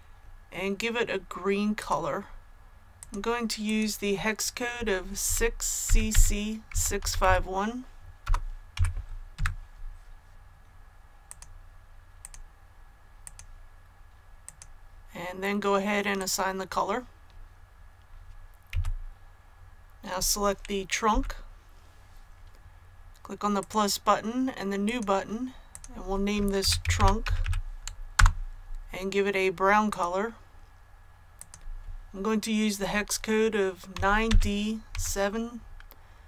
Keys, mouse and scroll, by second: 1.7 click, 5.2-8.7 typing, 11.2 click, 18.6 a, 23.5-24.5 drag, 26.5-27.3 typing, 28.1 Return, 29.8 click, 31.3 click, 33.8 KP_9, 34.8 KP_7.